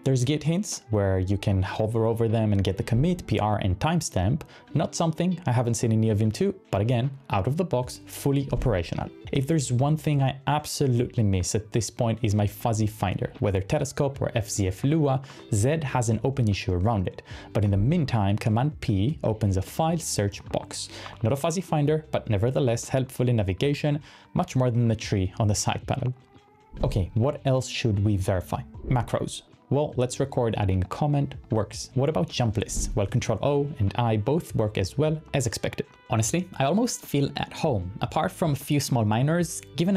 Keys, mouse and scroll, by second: 11.3 space, 11.4 space, 12.8 Down, 13.4 Down, 14.2 Down, 14.8 ctrl+c, 15.2 space, 15.4 /, 27.0 typing, 28.3-30.6 typing, 32.7-33.9 typing, 34.4 ctrl+o.